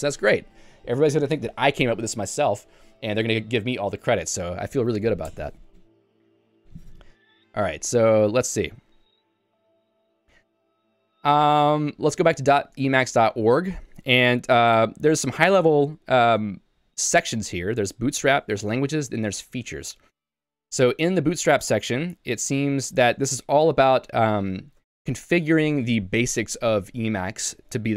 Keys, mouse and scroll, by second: 9.0 super+e, 10.2 k, 10.4 k, 11.0 j, 12.2 Return, 13.4 j, 13.7 k, 14.9 j, 15.3 k, 16.0 shift+Tab, 16.8-19.8 typing, 20.4 Tab, 21.1 j, 21.7 k, 22.0 shift+Tab, 22.4 shift+Tab, 25.1 j.